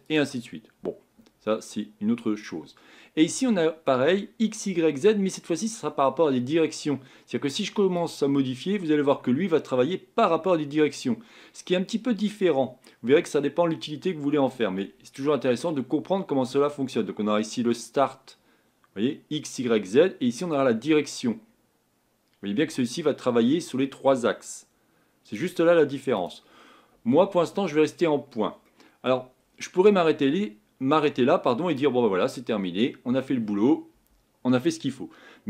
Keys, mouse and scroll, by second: 8.2-11.0 drag, 20.9-23.5 drag, 26.2 click.